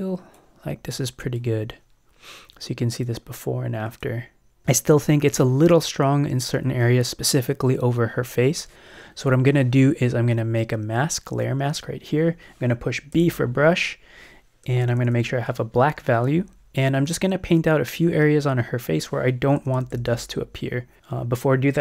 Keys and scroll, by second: 13.2 b, 14.7 [, 19.7 [.